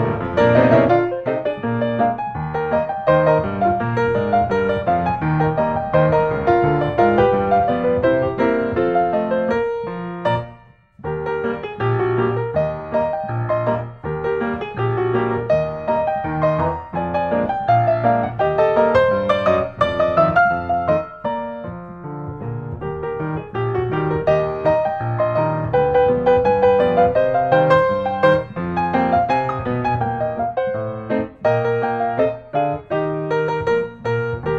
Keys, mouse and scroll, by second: 2.6-3.7 drag, 4.9-6.0 drag, 8.4-9.6 drag, 10.3-11.5 drag, 13.4-14.6 middle drag, 15.4-17.4 drag, 18.4-18.9 scroll, 19.5 click, 20.4-21.4 scroll, 22.2-23.3 drag, 24.5-25.6 drag, 26.1-27.2 drag, 28.0-29.2 drag, 29.4 click, 30.4 click, 32.1-32.5 scroll, 32.9 click.